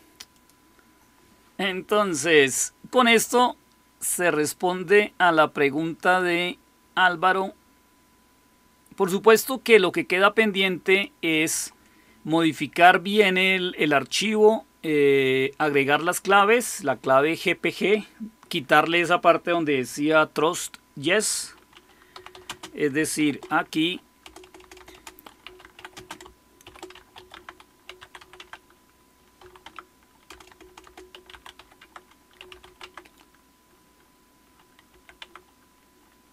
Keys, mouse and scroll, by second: 0.3 click, 3.1 click, 5.9-22.0 drag, 21.8-23.1 typing, 24.1-33.0 typing, 31.7 Tab, 34.5-35.3 typing.